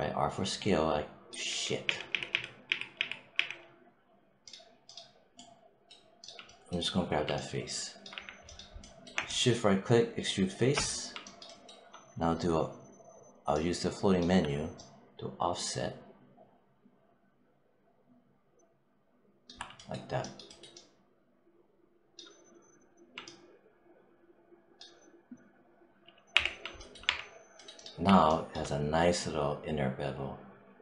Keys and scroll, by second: 1.3 z, 6.9 4, 8.0 5, 26.2 w, 26.9 3.